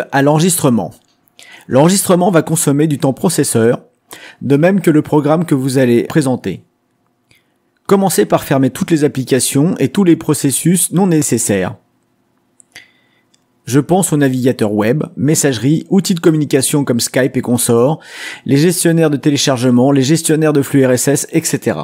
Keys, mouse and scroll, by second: 12.0-20.3 drag.